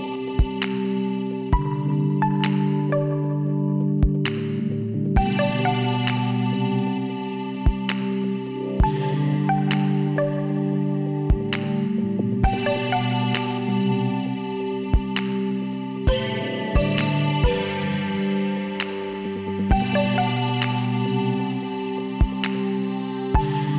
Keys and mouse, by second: 1.4 e, 6.1 ctrl+KP_Add, 7.1 s, 8.8 middle click, 9.3 a, 12.2 ctrl+r, 16.6-19.2 drag, 18.7 ctrl+KP_Add, 18.9 ctrl+KP_Add, 19.4 ctrl+KP_Add, 20.1 ctrl+KP_Add, 20.8 ctrl+KP_Add, 21.3 ctrl+KP_Subtract.